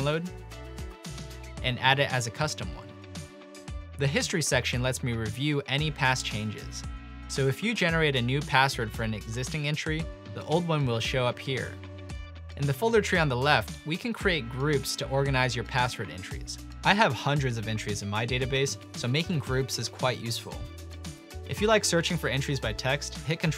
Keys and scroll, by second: 4.0 ctrl+e, 16.6-18.2 typing, 21.6 ctrl+f, 23.0-23.5 typing.